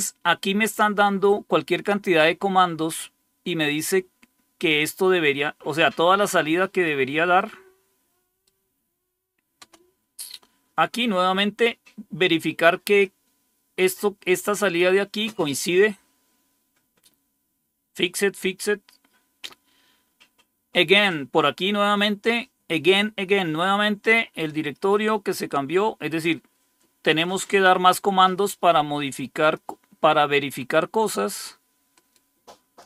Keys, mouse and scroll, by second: 6.5 right click, 7.3-8.4 right drag, 9.5 Return, 12.9-14.7 drag, 18.8 scroll down 2, 27.1-29.5 drag, 31.8 right click, 32.7 click.